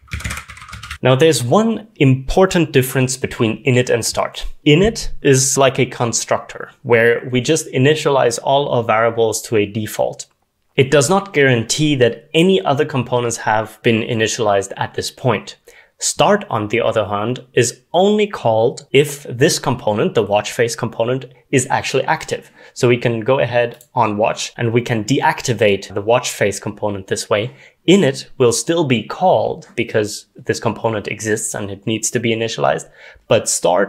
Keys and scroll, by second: 0.0-1.4 typing.